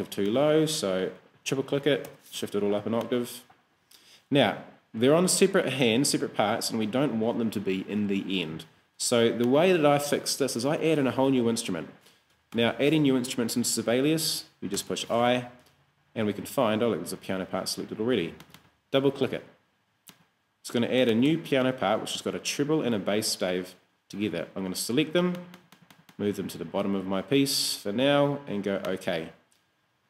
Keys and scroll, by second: 2.1 super+Up, 12.4 Escape, 14.8 i.